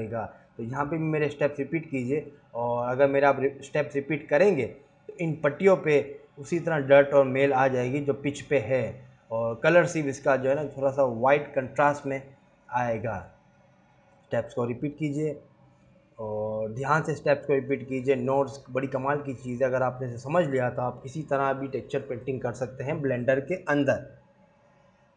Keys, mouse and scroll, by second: 22.7 click, 22.7-23.6 scroll down 8, 23.3 click, 23.9 g, 24.7-25.0 scroll up 2, 24.8 g.